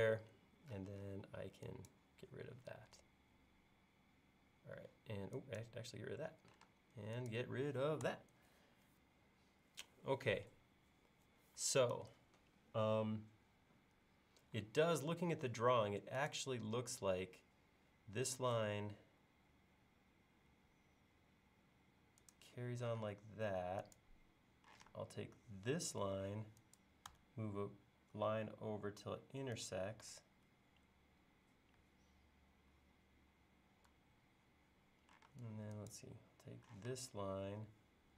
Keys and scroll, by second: 0.1 e, 6.7 space, 8.1 BackSpace, 15.1 l, 23.0 space, 24.8 m, 35.3 space, 36.8 m.